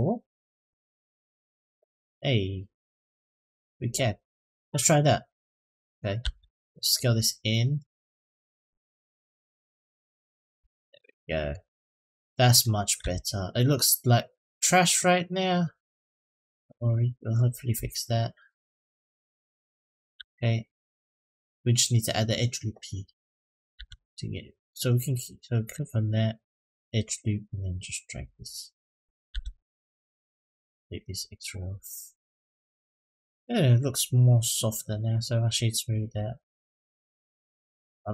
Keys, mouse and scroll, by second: 1.7-2.7 middle drag, 3.1-3.4 middle drag, 4.3 click, 5.6-6.0 scroll down 1, 6.0 Tab, 6.8 s, 10.4 Tab, 10.7 middle click, 11.6-12.1 scroll down 1, 12.2 middle click, 12.8 Tab, 14.6 click, 15.5 click, 16.3 click, 16.7 click, 17.5 s, 19.9 Tab, 20.7-21.0 middle drag, 23.5 Tab, 25.4 click, 26.6-28.7 drag, 29.1 Tab, 29.5 click, 30.4 click, 30.9-33.7 middle drag, 34.6-35.3 right drag, 35.6 click, 35.8 click, 36.2 right click, 37.2-37.8 middle drag.